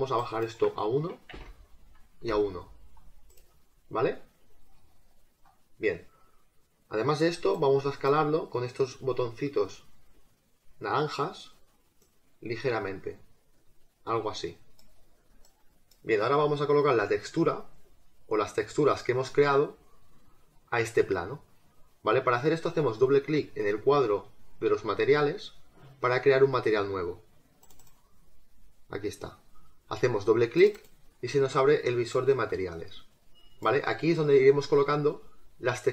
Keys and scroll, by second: 1.3 1, 1.8 Tab, 2.2 1.